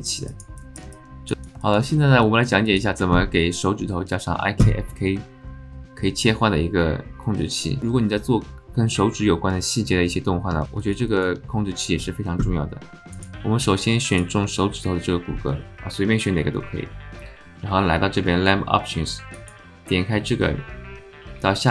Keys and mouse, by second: 0.0 alt+shift+middle click, 0.3 alt+shift+middle click, 0.6 shift+middle click, 0.9 alt+middle click, 1.3 alt+click, 1.6 alt+shift+middle click, 2.1 middle click, 2.2 click, 2.6 alt+shift+click, 10.8 alt+shift+click, 11.1 alt+click, 14.1 click, 19.4-21.4 drag.